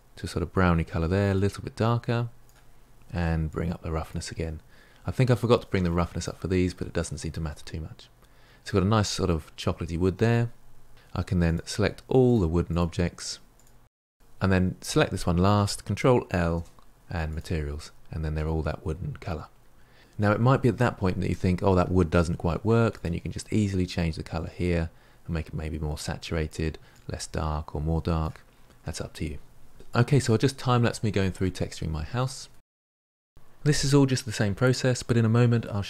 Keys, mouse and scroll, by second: 3.5-7.4 drag, 7.4-11.0 middle drag, 11.0 click, 11.3 shift+click, 11.6 shift+click, 12.0 shift+click, 12.4 shift+click, 12.7 shift+click, 12.9 shift+click, 13.2 shift+click, 13.5 shift+click, 13.8 shift+click, 14.1-14.9 scroll up 2, 14.9 shift+click, 17.3 ctrl+l, 17.8-18.3 scroll down 3, 18.3-23.9 middle drag, 23.9 click, 29.7-30.1 shift+middle drag, 30.2-30.6 drag, 30.8 click, 30.9 ctrl+z, 31.2 ctrl+z, 31.6 click, 31.7 click, 32.9 click, 33.6-33.9 middle drag, 33.9 click, 34.1 shift+click, 34.2 ctrl+l, 34.3 middle click, 34.4 click, 34.5 middle drag, 34.6 shift+click, 34.7 shift+click, 34.8 ctrl+l, 34.9 middle click, 35.0 click, 35.0 middle drag, 35.1 scroll up 2, 35.1-35.7 shift+click, 35.2 shift+click, 35.8 middle drag.